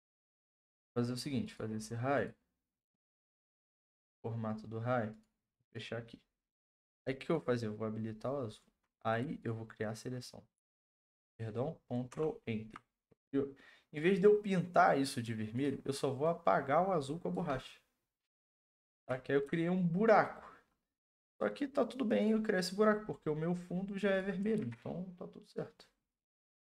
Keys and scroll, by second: 10.6 ctrl+d, 12.1 ctrl+Return, 18.9 ctrl+d, 24.5 ctrl+t, 26.5 Return.